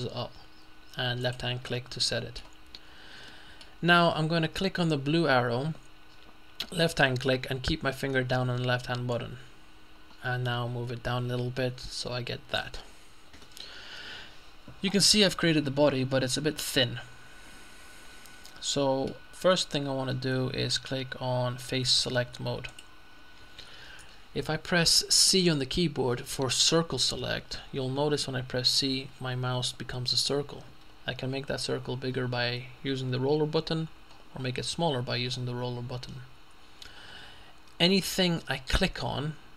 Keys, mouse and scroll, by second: 1.3 click, 2.1 middle click, 3.4 middle click, 9.2-13.0 drag, 13.0-13.5 scroll down 1, 13.5 middle click, 22.7 click, 28.8 g, 31.3-32.1 scroll down 2, 32.1-32.8 scroll down 1, 34.2-34.7 scroll up 2, 34.7-35.3 scroll up 1, 36.6-37.3 scroll up 2.